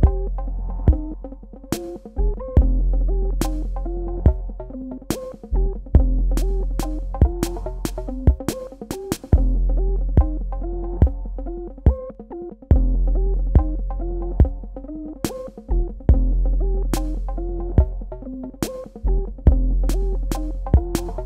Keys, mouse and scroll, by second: 6.6 click, 9.9 space, 10.0 click, 10.8 space, 11.0 ctrl+click, 13.0 ctrl+alt+click, 14.8 space, 15.0 click, 15.4 space, 15.8 Tab, 16.5 click.